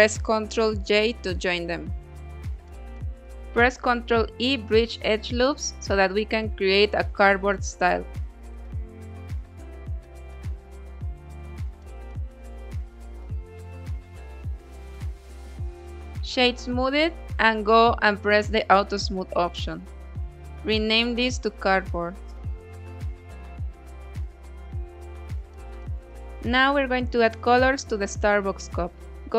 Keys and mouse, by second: 0.3 shift+middle click, 1.2 middle click, 2.2 ctrl+e, 4.5-7.4 drag, 7.5 Tab, 8.3-9.3 middle drag, 10.2 s, 10.5 shift+z, 12.1 click, 12.6 middle drag, 12.7-13.1 drag, 13.1-14.7 middle drag, 15.0-15.7 drag, 15.7 middle click, 16.8 click, 17.2 click, 17.9 middle click, 19.6-22.7 drag, 23.3-24.5 middle drag, 24.7 click, 25.3-28.9 middle drag.